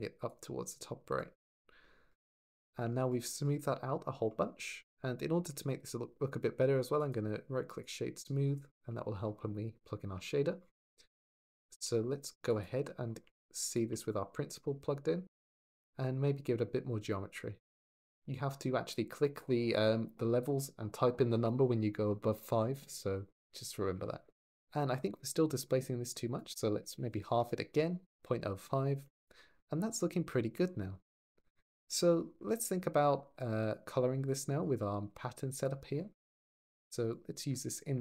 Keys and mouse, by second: 0.1 click, 2.6 shift+middle click, 4.7 click, 5.2 shift+middle click, 5.6 middle click, 8.7-9.2 drag, 11.3 click, 11.5 g, 12.3 click, 15.3 middle drag, 17.6 click, 26.1-27.2 drag, 27.2 middle click, 28.8 shift+middle click, 31.8 click, 33.2 drag, 34.1 click, 34.9 g, 35.3 click, 36.3 click, 36.9 drag.